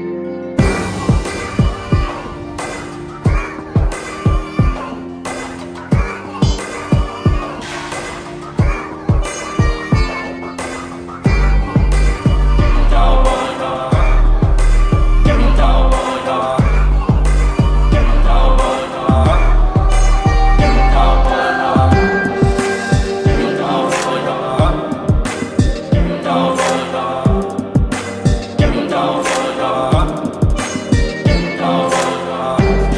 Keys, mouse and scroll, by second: 3.3 click, 4.1 click, 7.9-9.4 drag, 9.1 click, 9.5-12.9 drag, 20.0 right click, 21.2 click, 23.1 v, 23.4 ctrl+t, 25.5 shift+click, 25.5-26.4 shift+drag, 27.4-29.0 shift+drag.